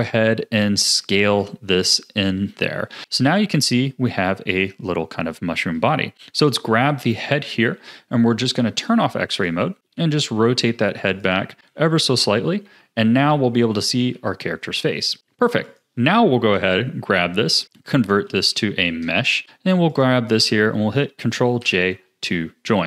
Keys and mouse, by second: 2.4 a, 3.0 Tab, 3.0 s, 4.1-5.6 middle drag, 7.3 KP_3, 9.9 r, 11.6 KP_1, 12.6 g, 14.1 a, 17.4 space, 19.9 shift+click, 21.6 ctrl+j.